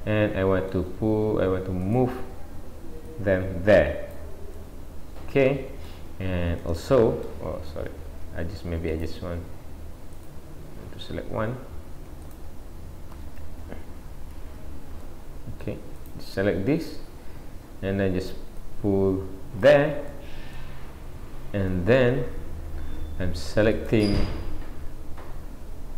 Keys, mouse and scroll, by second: 1.8 click, 3.1 click, 4.5 middle click, 6.6 middle click, 7.9 ctrl+z, 8.9 click, 10.2 click, 12.3 shift+click, 13.5 ctrl+z, 14.3 a, 15.1 middle click, 16.0 click, 16.5 scroll down 1, 18.6 click, 20.1 middle click, 23.8 click, 24.3 scroll up 1.